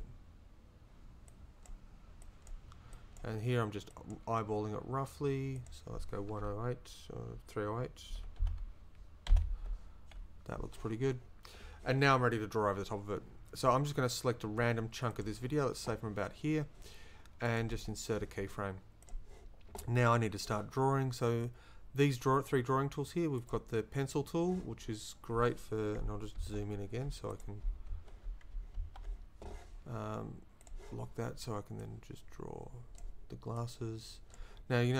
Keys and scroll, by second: 8.1 3, 8.4 0, 9.3 8, 9.6 Return.